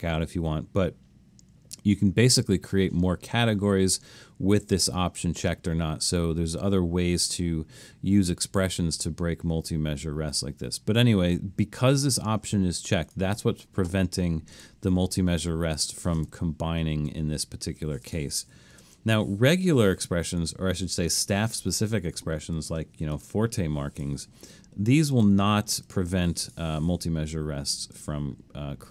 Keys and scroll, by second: 16.5 Escape, 17.0 super+z, 18.8 BackSpace, 23.1 4, 24.2 Escape.